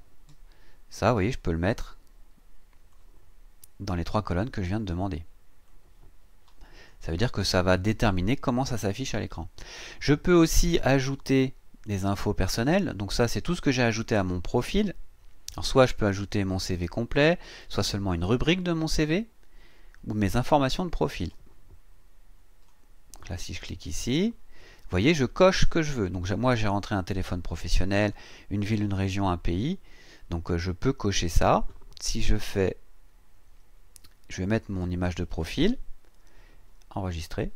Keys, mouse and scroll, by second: 2.9-4.3 drag, 5.6-7.1 drag, 11.8 click, 13.8-14.2 scroll down 2, 15.3 scroll up 1, 21.0-22.9 drag, 26.6 click, 28.0 click, 28.9 click, 32.0-33.1 scroll down 3, 34.5 click, 35.9-36.3 scroll down 1, 37.1 click.